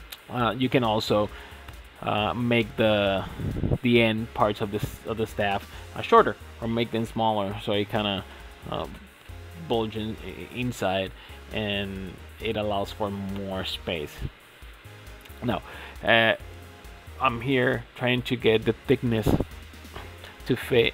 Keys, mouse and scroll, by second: 0.1 middle drag, 0.4 f, 0.5 middle click, 0.7 Tab, 1.0 KP_Divide, 1.2 scroll down 5, 1.3 drag, 1.4 middle drag, 1.6 scroll up 3, 1.7-2.3 middle drag, 2.3 scroll down 2, 2.4 middle click, 2.9-3.2 scroll down 4, 3.2 shift+middle click, 3.5 click, 4.2 click, 4.8-5.7 middle drag, 5.7-8.8 scroll up 2, 12.1-12.8 middle drag, 12.8 scroll up 3, 13.3 click, 15.1 click, 15.5-16.3 drag, 16.3 Tab, 17.4 1, 18.3 click, 19.2 ctrl+a, 20.5 click, 20.8 ctrl+a.